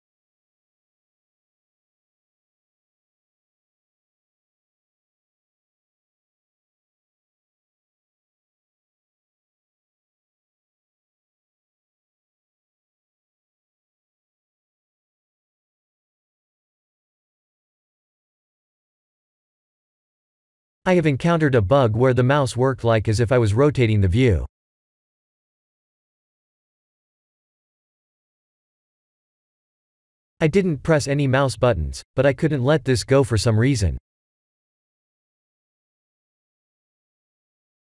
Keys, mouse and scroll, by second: 0.1-1.6 scroll up 1, 1.6 scroll up 1, 1.7 middle click, 4.2 middle click.